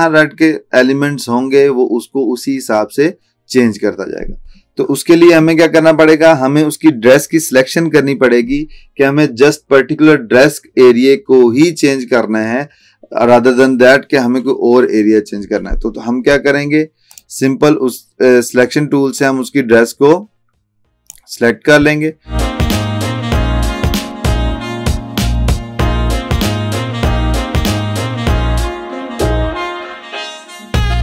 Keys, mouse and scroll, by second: 17.1-21.4 drag, 22.4-22.8 alt+click, 22.9 alt+scroll up 1, 23.2 alt+click, 24.0 alt+scroll down 1, 24.3 space, 24.4 click, 24.5 space, 24.9 alt+scroll up 1, 25.0 space, 25.0 click, 25.3-25.8 alt+drag, 26.4 alt+click, 26.9 click, 27.0 space, 27.2 scroll up 2, 27.4 alt+click, 28.1 alt+Num_Lock, 28.1 alt+click, 29.0 alt+scroll down 1, 29.5 alt+click, 30.2 ctrl+z.